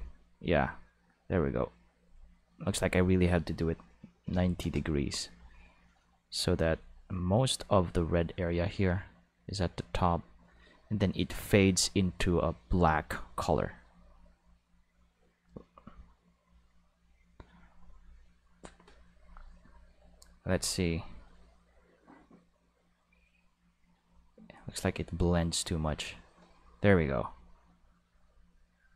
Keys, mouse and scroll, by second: 4.2 9, 4.4 0, 4.6 Return, 6.7-11.4 drag, 12.7 click, 13.9-17.1 drag, 20.4-28.9 drag.